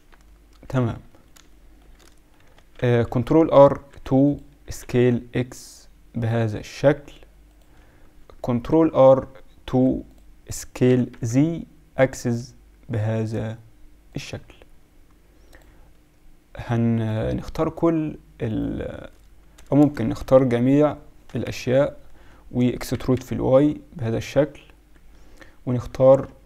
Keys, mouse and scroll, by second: 0.2 middle click, 2.5 Tab, 3.0 ctrl+r, 8.4 ctrl+r, 15.6-17.3 drag, 16.9-19.5 right drag, 19.5 a, 19.8 a, 20.3 KP_7, 21.4 KP_Decimal, 22.9 e, 25.8 z.